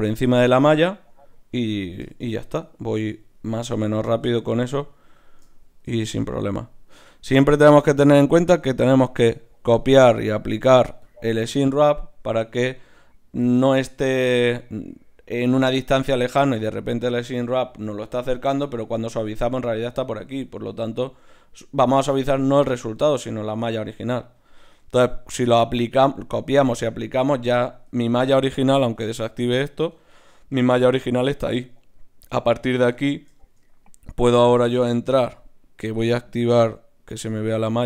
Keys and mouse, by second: 1.6 Tab, 3.0 Tab, 9.8-14.2 drag, 15.5-19.9 middle drag, 19.9-24.9 drag, 24.9-27.9 middle drag, 27.9 Tab, 28.9-31.0 drag, 29.9 Tab, 30.3 right click, 31.0-32.9 middle drag, 32.9 Tab, 34.3-37.8 drag.